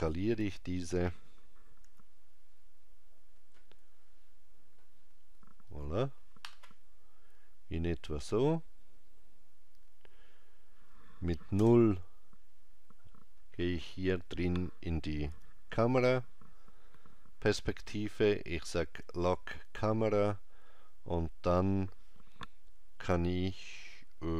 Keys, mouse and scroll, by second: 11.6 KP_0, 19.3 click.